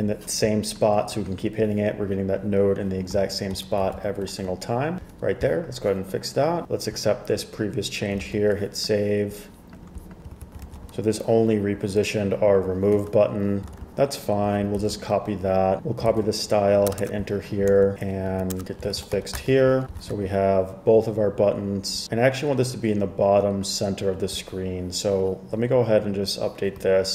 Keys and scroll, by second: 8.3 super+s, 10.5 super+z, 10.8 super+s, 13.1 super+Tab, 13.8 super+Tab, 14.9 super+c, 16.2 super+c, 17.0 Return, 17.1 Return, 17.8 super+v, 18.4 Right, 18.6 Return, 19.1 super+x, 19.3 super+s, 19.5 super+Tab, 20.2 super+Tab.